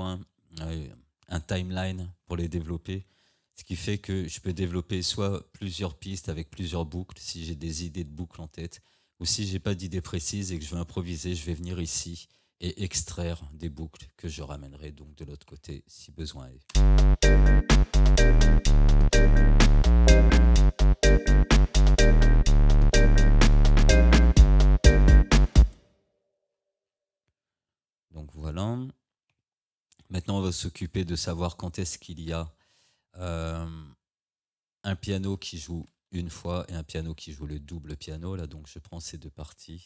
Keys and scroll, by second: 4.5 Tab, 9.6 Tab, 14.8 Tab, 16.8 space, 25.6 space, 29.4 Tab.